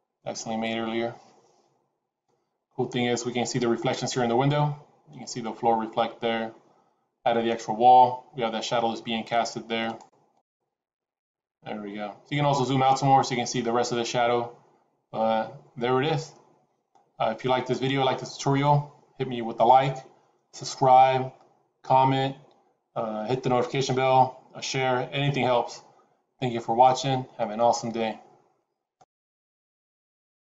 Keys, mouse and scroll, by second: 7.6 F12.